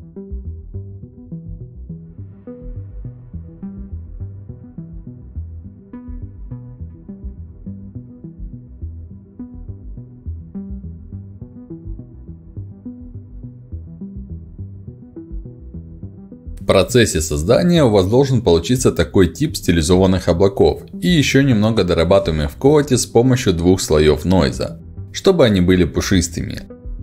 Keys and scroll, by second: 3.2 5, 12.7 3, 25.5 f.